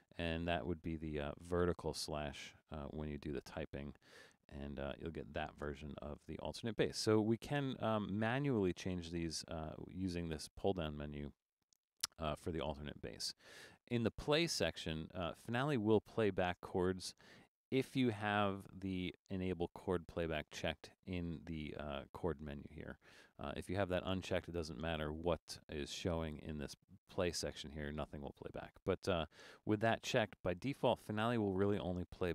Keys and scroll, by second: 5.7 Return, 25.6 Return.